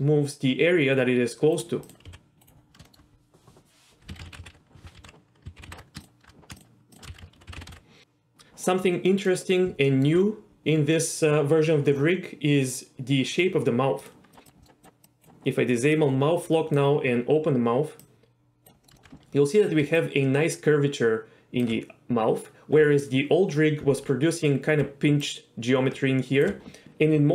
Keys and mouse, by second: 1.8 click, 2.1 g, 2.4 right drag, 2.8 shift+middle click, 4.1 a, 4.3 alt+r, 4.4 alt+g, 5.0 alt+s, 5.6 alt+g, 5.7 alt+r, 6.0 shift+click, 6.6 shift+click, 7.1 a, 7.5 alt+r, 7.6 alt+g, 7.7 alt+s, 9.1 middle click, 9.9 shift+middle drag, 14.0 drag, 14.3 click, 14.4 click, 14.6 middle click, 15.0 click, 16.0 click, 18.1 click, 18.8 middle click, 18.9 shift+middle click, 19.8-21.6 d, 19.9-21.6 drag, 22.4 d, 24.8 d, 25.2-26.4 drag, 26.4 d.